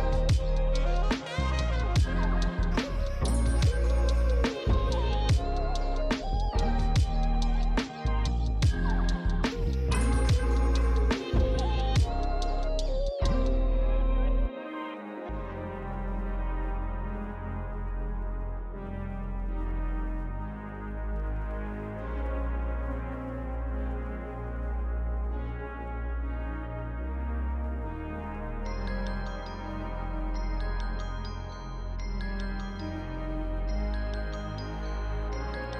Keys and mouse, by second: 1.9 Tab, 2.9 a, 3.1 click, 3.6 Tab, 3.6 click, 11.0 click, 27.7 click, 28.0 Tab, 28.4 click, 28.6-29.9 typing, 29.8 click, 30.1 Tab, 30.2 click, 30.5 Tab, 30.7 ctrl+z, 31.8 Tab, 32.0 click, 32.8 Tab, 33.1 click, 33.4 shift+click, 34.5 shift+click, 35.3 click.